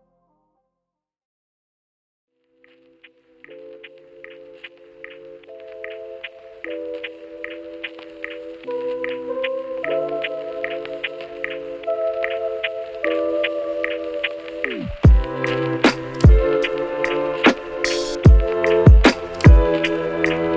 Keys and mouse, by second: 0.2 Tab, 0.2 a, 0.2 s, 0.6 ctrl+z, 0.7 a, 0.7 s, 1.9 Tab, 2.1 a, 3.4 ctrl+Tab, 3.4 ctrl+click, 3.5 ctrl+r, 3.7 alt+s, 3.7 shift+click, 4.9 ctrl+r, 5.1 alt+s, 5.4 Tab, 5.5 Tab, 5.7 ctrl+r, 6.0 alt+s, 6.3 middle click, 7.1 KP_3, 7.3 KP_1, 7.5 Tab, 8.0 ctrl+a, 8.2 Tab, 8.4 Tab, 8.4 ctrl+b, 9.2 ctrl+z, 9.6 ctrl+b, 10.0 Tab, 10.5 ctrl+z, 10.7 Tab, 10.7 a, 11.6 shift+middle click, 12.3 shift+middle click, 12.4 a, 12.8 Tab, 13.2 alt+shift+middle click, 13.4 shift+s, 13.9 Tab, 13.9 shift+a, 14.7 s, 15.0 s, 16.6 shift+s, 16.7 shift+click, 18.0 KP_Divide, 18.2 q, 18.2 shift+middle click, 18.5 shift+middle click, 18.6 Tab, 18.8 Tab, 19.0 ctrl+b, 19.8 Tab, 19.8 q, 20.0 Tab.